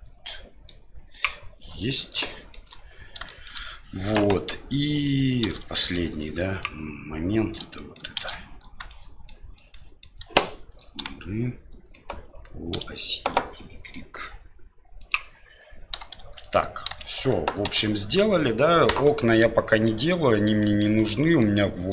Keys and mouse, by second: 2.3 shift+middle click, 3.4 shift+middle click, 5.4 shift+z, 6.0 click, 7.7 shift+middle click, 8.1 shift+z, 8.9 middle click, 9.7 middle click, 11.0 g, 16.2 shift+z, 16.6 middle click, 17.0 shift+z, 17.4 middle click, 17.6 Tab, 18.3-19.8 middle drag, 20.4-20.8 middle drag, 21.4-21.9 middle drag.